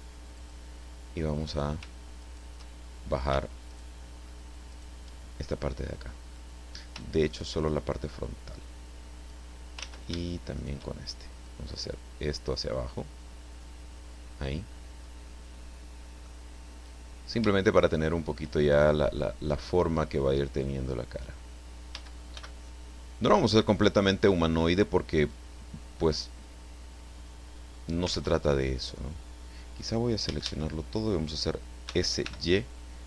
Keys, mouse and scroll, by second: 0.4 click, 1.4 right click, 2.2 shift+right click, 3.7 shift+right click, 4.0 shift+middle click, 4.7 shift+right click, 7.3 shift+right click, 8.2-9.5 drag, 9.8 ctrl+z, 10.5 shift+right click, 11.5-15.2 drag, 16.3-18.5 middle drag, 18.5-18.9 shift+scroll up 3, 20.6 click, 21.9 a, 22.3 b, 23.3 click, 25.3-28.1 drag, 28.1 ctrl+z, 30.2 a, 31.9 s, 32.3 y.